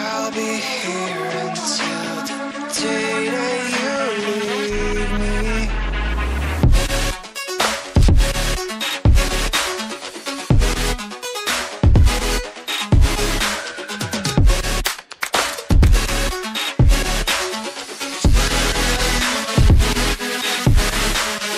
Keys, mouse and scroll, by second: 10.9 click, 15.6 click, 16.7 ctrl+z, 17.2 ctrl+z, 17.5 ctrl+z, 17.7 ctrl+z, 17.9 ctrl+z, 18.8 ctrl+z, 19.1 ctrl+click, 20.0 click, 20.4 scroll up 1.